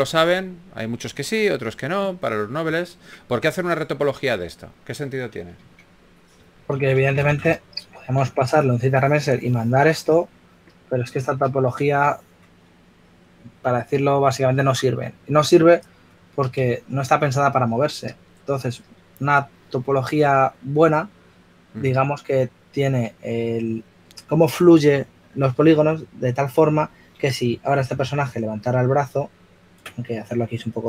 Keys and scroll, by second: 6.1 shift+f, 7.4 typing, 9.0 s.